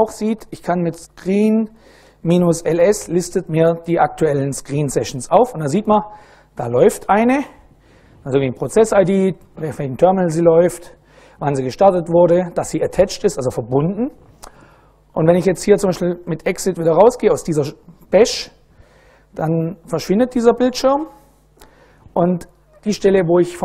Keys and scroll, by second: 0.3-3.1 typing, 4.9 Return, 17.9-19.2 typing, 20.5 Return.